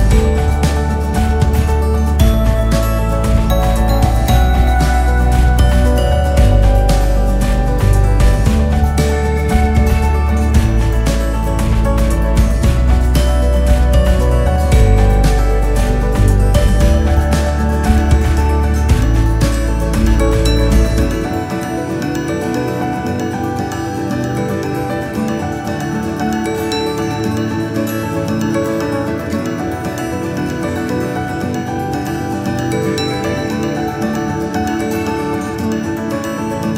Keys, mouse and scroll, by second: 5.7 g, 8.7 shift+d, 12.7 shift+d, 18.0 KP_8, 18.3 scroll down 2, 18.6-19.1 drag, 19.6-23.4 KP_6, 24.0 click, 24.8 KP_1, 26.1 g, 31.0 s, 33.2 g, 36.2 s.